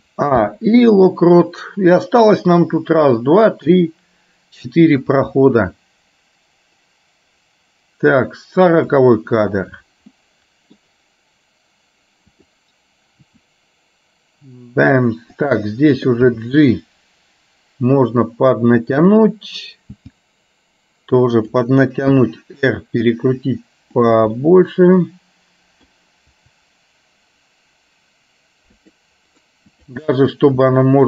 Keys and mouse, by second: 0.5 i, 5.3-9.2 drag, 10.3 middle click, 12.4 click, 13.4 r, 16.4 g, 19.2 click, 20.2 g, 22.3 r, 24.4-25.9 middle drag, 26.5 r, 30.8 r.